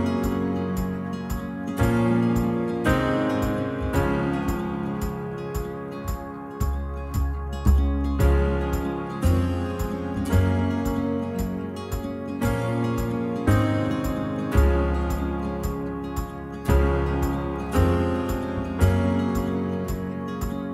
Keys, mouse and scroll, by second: 0.6 right click, 0.9 click, 1.8-2.4 space, 2.7 shift+Left, 3.4 alt+click, 4.1 middle drag, 4.4 shift+click, 4.5-5.5 middle drag, 5.5 shift+drag, 5.8-6.2 right drag, 6.3 scroll down 7, 6.6-7.8 middle drag, 7.8-8.1 scroll up 2, 8.1 alt+click, 8.6 middle click, 8.8 space, 9.2 shift+Left, 9.6 scroll up 2, 9.9-10.4 scroll down 1, 10.4 alt+shift+click, 10.8 alt+shift+click, 11.2-11.7 shift+middle drag, 11.7 alt+shift+click, 11.9 scroll down 1, 12.1-13.2 shift+middle drag, 13.2 scroll up 1, 13.5 alt+shift+click, 13.9 alt+shift+click, 14.3-14.8 middle drag, 14.8 alt+shift+click, 15.0-15.3 middle drag, 15.3-15.7 scroll down 2, 15.5 middle drag, 16.1 right drag, 16.3 click, 17.3 l, 17.8 h, 18.5 alt+click, 18.6-18.9 middle drag, 18.9 shift+click, 19.2 shift+click, 19.9 c.